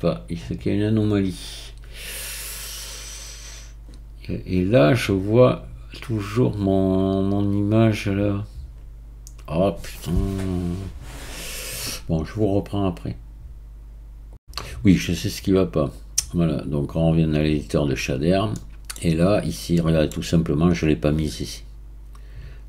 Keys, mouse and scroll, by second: 0.6-10.8 drag, 17.6-22.6 drag.